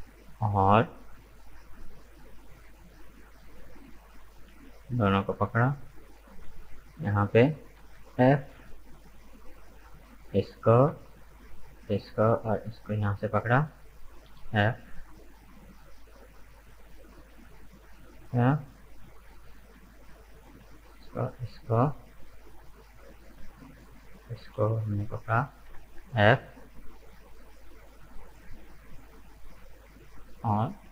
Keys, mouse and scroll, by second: 3.6 right click, 4.2 shift+right click, 4.6-6.3 middle drag, 6.3 shift+right click, 6.6-7.8 middle drag, 7.8 f, 8.4 right click, 8.7-9.8 middle drag, 9.8 right click, 10.1-11.7 middle drag, 11.7 shift+right click, 12.6 shift+right click, 13.0 middle click, 13.7 f, 14.2 right click, 14.7-17.7 middle drag, 20.2 right click, 21.1 shift+right click, 21.6-24.1 middle drag, 24.1 shift+right click, 24.8 middle click, 25.7 f, 26.1 right click, 26.6-28.8 middle drag, 28.8 right click, 29.3 shift+right click, 30.0 shift+right click, 30.6 shift+right click.